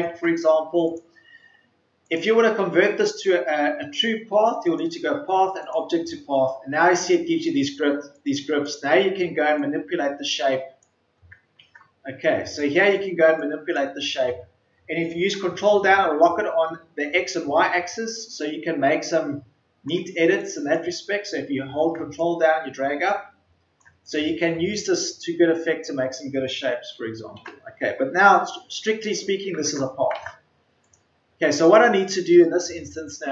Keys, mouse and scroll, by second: 32.3 Delete.